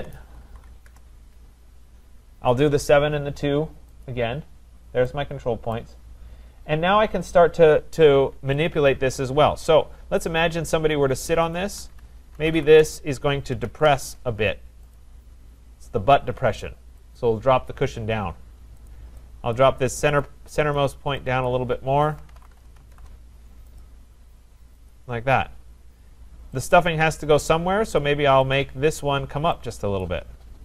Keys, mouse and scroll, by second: 0.0-1.1 typing, 4.0 click, 5.1 typing, 5.8 right click, 6.2-7.5 scroll, 8.7 click, 10.2 shift+click, 11.6 click, 12.4-13.8 typing, 15.0 click, 17.2 click, 18.0-18.7 typing, 18.9 click, 19.5 click, 20.6 click, 20.8 click, 21.5 click, 22.0-23.3 typing, 23.8 click, 24.9 click, 25.3-25.8 scroll, 25.8-26.2 scroll, 26.6 click, 27.3 click, 28.0 click, 28.6 click, 30.1 click.